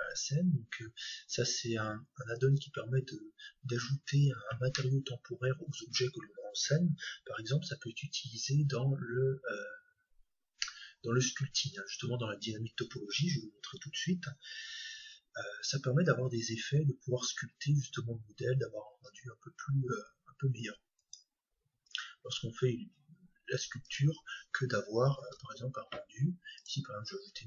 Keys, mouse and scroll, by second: 25.2 shift+a.